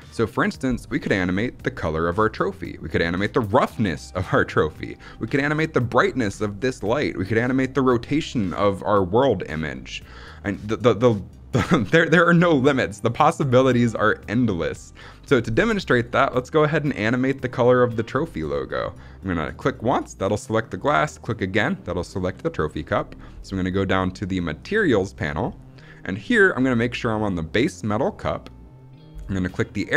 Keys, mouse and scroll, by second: 15.6-17.9 scroll up 2, 19.4 click, 21.1 click, 24.5 click, 29.8 click.